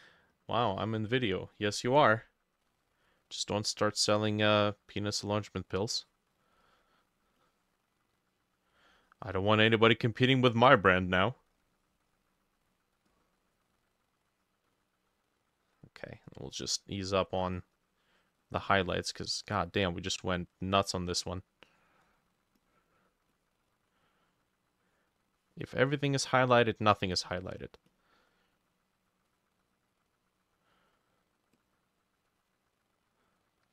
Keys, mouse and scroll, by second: 7.1-19.0 drag, 21.4-33.7 drag.